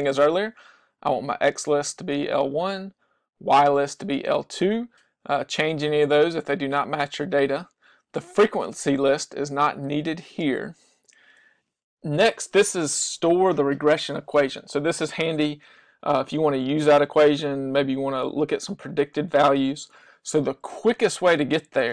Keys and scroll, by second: 2.4 Down, 7.2 Down, 11.1 Down.